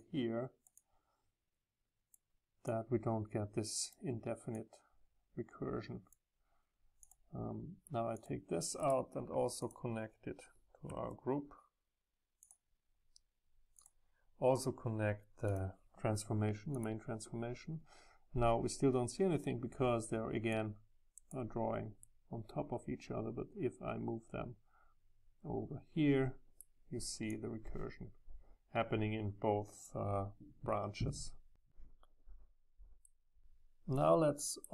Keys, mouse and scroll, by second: 2.0-2.6 drag, 2.8 click, 5.6-8.1 drag, 8.3-10.8 drag, 12.4-18.7 right drag, 20.6 right click, 20.9 click, 22.0-23.6 right drag, 23.6 middle click, 24.5-27.2 middle drag, 27.3 click, 27.6 click, 30.3 click, 33.1 middle click, 33.5 scroll down 2.